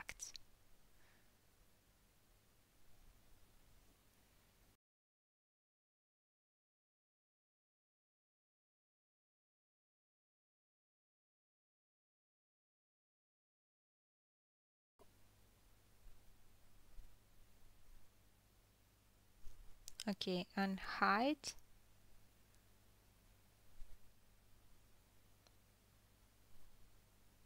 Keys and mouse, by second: 1.0-4.0 drag, 2.2 g, 4.0-4.5 middle drag, 4.5-6.6 drag, 5.4 g, 6.6-7.0 middle drag, 7.0-9.2 drag, 7.8 g, 9.2-9.5 middle drag, 9.5-12.0 drag, 10.5 g, 12.0-12.5 ctrl+middle drag, 12.5-15.2 drag, 13.4 g, 15.2-18.9 middle drag, 21.0 alt+h, 21.6 click, 21.7-22.8 middle drag, 22.8 middle click, 23.5-26.2 middle drag, 26.2 click, 26.4-27.0 middle drag, 27.0 click, 27.0-27.4 middle drag.